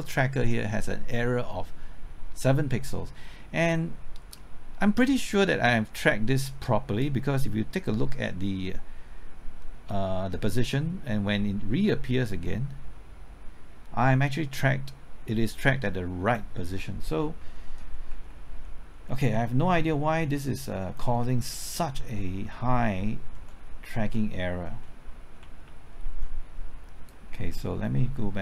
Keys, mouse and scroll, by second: 4.3 middle click, 5.0-5.5 scroll up 1, 5.5 middle click, 5.9-7.0 scroll up 1, 7.0-12.6 drag, 12.9-16.6 drag, 17.3 Right, 17.7-18.6 typing, 19.0 Left, 23.3 Right, 23.6 Left, 24.1 Right, 24.9 Left, 27.0-28.4 drag.